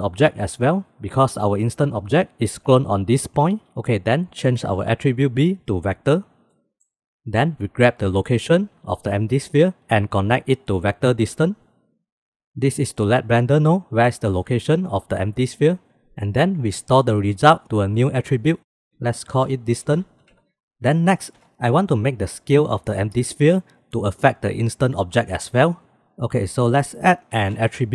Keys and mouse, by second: 4.8-6.1 drag, 16.8-20.4 drag, 20.4 ctrl+z, 21.4 s, 26.9 shift+a.